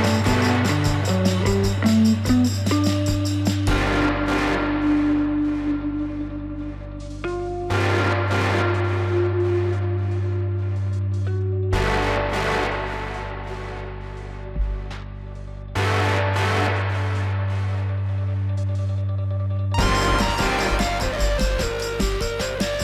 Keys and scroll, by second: 3.9 alt+w, 5.0 F3, 8.2 alt+w.